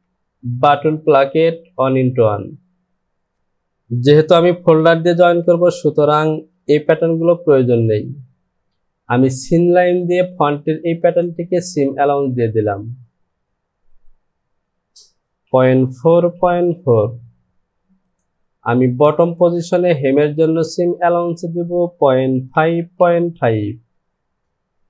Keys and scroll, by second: 15.4 KP_Decimal, 15.9 KP_4, 16.1 Down, 22.2 KP_Decimal, 22.5 KP_5, 22.8 Down, 23.3 KP_Decimal.